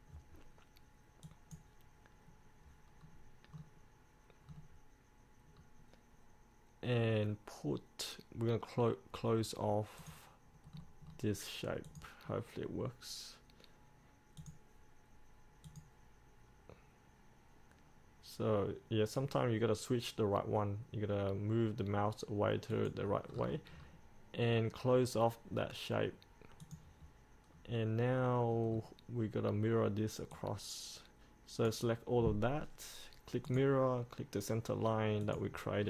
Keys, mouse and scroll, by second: 3.1 scroll up 1, 3.7-4.6 scroll down 1, 5.7 scroll up 1, 10.1 click, 10.9-12.0 scroll down 1, 12.0 click, 23.4 scroll up 1, 26.7 click, 27.6 scroll up 1, 30.5-35.8 drag.